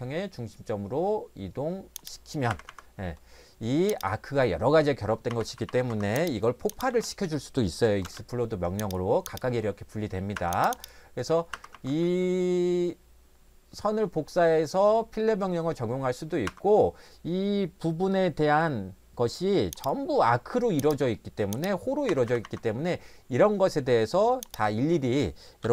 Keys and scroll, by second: 2.5 Escape, 2.7 Escape, 5.3 Escape, 5.5 Escape, 5.7 Escape, 5.9 Escape, 6.9 x, 8.1 space, 10.3 Escape, 11.5 Escape, 11.7 Escape, 16.5 Escape, 22.1 Escape, 22.3 Escape, 22.4 Escape, 25.4-25.7 typing.